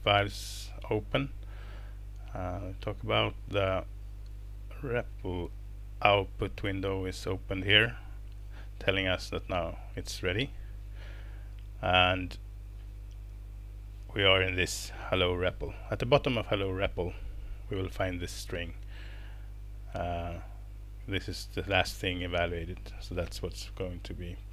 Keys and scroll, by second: 10.8 typing, 19.6 super+Down.